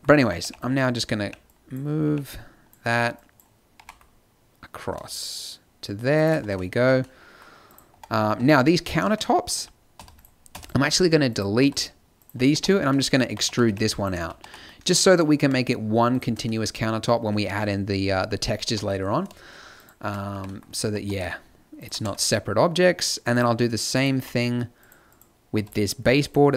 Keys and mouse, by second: 0.2-3.8 typing, 6.4 Tab, 6.7 z, 7.6-9.3 drag, 7.9 Tab, 8.3 Tab, 10.0 x, 10.5 x, 11.6 x, 12.5 Tab, 13.2-14.4 typing, 14.8-16.1 middle drag, 18.6 g, 20.3 g, 22.0 Tab, 23.3 right click, 24.1 z, 25.7 x, 26.4 x.